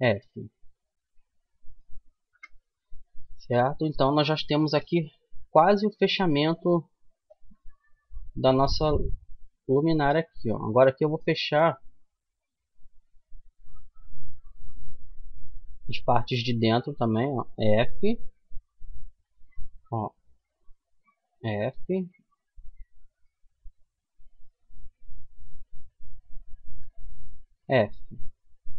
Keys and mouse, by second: 1.7 KP_1, 7.6-9.0 middle drag, 9.0-10.9 right drag, 13.3-15.5 middle drag, 15.5-17.4 right drag, 16.9 f, 18.7-21.5 right drag, 20.6 f, 22.4-24.2 drag, 23.6-27.0 right drag, 26.4 f.